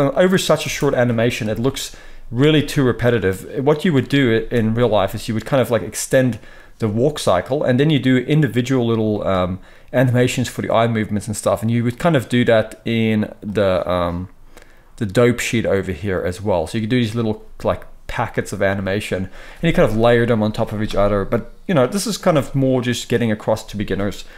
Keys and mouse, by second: 0.2-11.8 middle drag, 0.5 space, 1.4 KP_0, 4.3 space, 12.7 click, 16.3-23.0 drag, 23.0-24.3 middle drag.